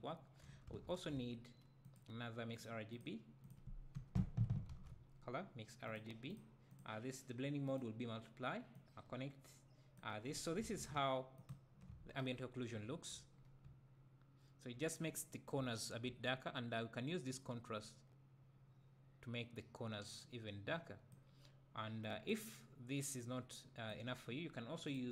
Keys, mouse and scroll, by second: 3.5 click, 4.0 Delete, 8.8-11.5 drag, 12.3-12.9 scroll down 2, 12.9 `, 13.4 scroll up 2, 13.7 `, 17.8-23.3 drag.